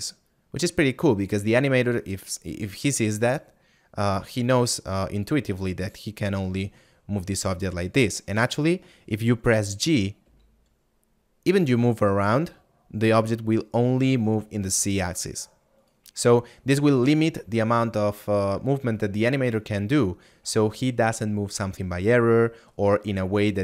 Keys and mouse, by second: 5.6 click.